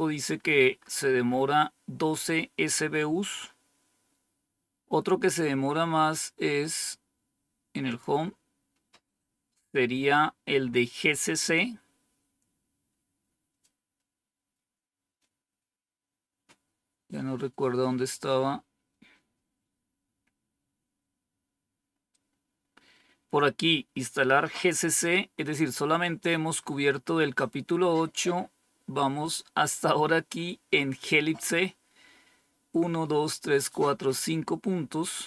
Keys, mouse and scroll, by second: 7.8 click, 9.8-11.6 scroll down 7, 12.2-13.1 scroll down 2, 13.1-14.9 scroll down 1, 14.9-15.6 scroll down 1, 15.6-16.2 scroll down 1, 16.2-17.0 scroll down 1, 17.0-18.3 scroll up 2, 18.4-19.2 scroll up 2.